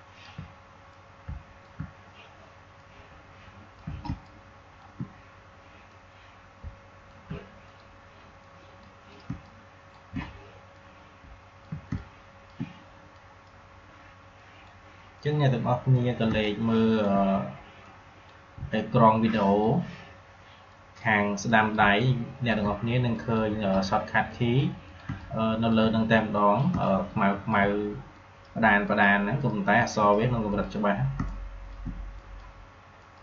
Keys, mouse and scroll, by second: 2.7-4.0 drag, 4.0 space, 4.1 click, 4.3 click, 4.4 space, 5.8-7.6 drag, 7.6 click, 9.2 space, 9.3 click, 9.6 space, 10.7 click, 11.8 space, 11.9 click, 12.3 space, 13.1-14.3 drag, 16.1 space, 16.3 click, 16.7 space, 17.7-19.3 drag, 21.7 space, 21.9 click, 22.1 space, 23.1 click, 25.0 space, 25.1 click, 25.4 space, 26.3 click, 26.6 space, 26.8 click, 27.1 space, 28.1 click, 31.1 space, 31.2 click, 31.5 space, 32.1 click.